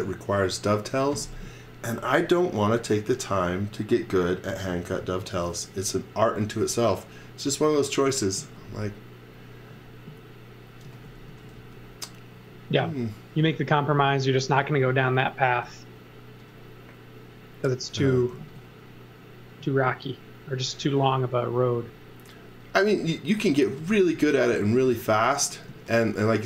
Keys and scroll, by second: 10.6-12.6 typing, 15.5 space, 18.3 z, 19.3 z, 20.7 space, 21.7 space, 23.4-25.3 typing.